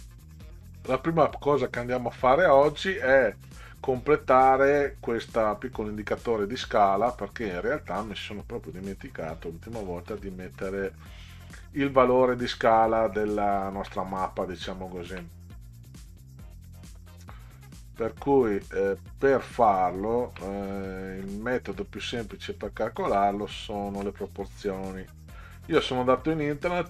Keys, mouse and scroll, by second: 7.5-8.0 middle drag, 9.0-9.7 ctrl+scroll up 4, 13.6 ctrl+scroll down 2, 14.3-15.1 ctrl+scroll down 4, 16.7 middle click, 18.1 middle click, 19.0-19.3 ctrl+scroll up 2, 20.0 ctrl+scroll up 2, 22.1 scroll up 2, 22.8-23.2 ctrl+scroll up 2, 26.7 click.